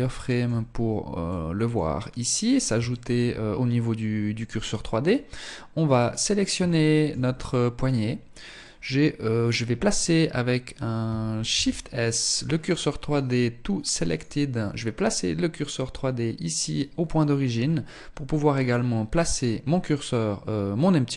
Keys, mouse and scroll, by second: 0.3 middle click, 2.2 shift+middle click, 3.6 middle click, 5.2 right click, 6.0 shift+middle click, 6.7 middle click, 7.3 scroll up 4, 10.8 shift+s, 16.2-16.6 scroll up 2, 16.7 scroll down 3, 17.9 right click.